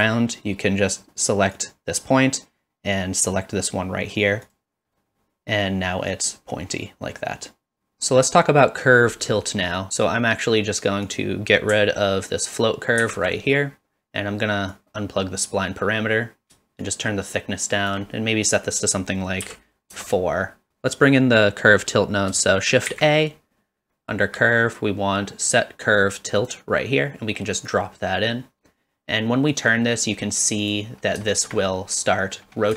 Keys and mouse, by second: 11.1 click, 13.0 ctrl+x, 14.8-15.4 drag, 16.8-18.0 shift+drag, 18.6-20.4 drag, 22.9 shift+a, 29.5-30.7 drag, 31.3 shift+middle click, 31.7 middle click.